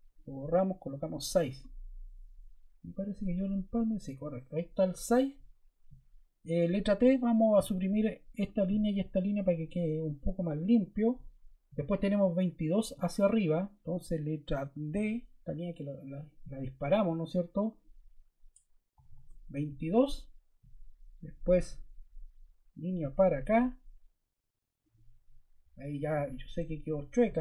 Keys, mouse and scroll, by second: 0.8 typing, 7.5 t, 8.4 click, 9.2 click, 13.8 ⟲, 14.9 d, 19.0 typing.